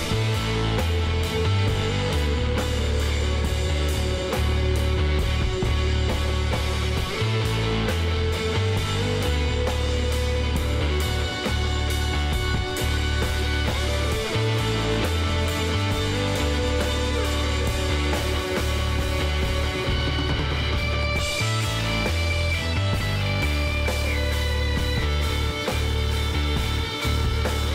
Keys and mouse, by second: 1.9-5.3 middle drag, 4.7 KP_3, 7.5 Tab, 9.7 Tab, 11.4 w, 12.3 click, 17.5-18.5 middle drag, 21.6 ctrl+r, 26.0 k.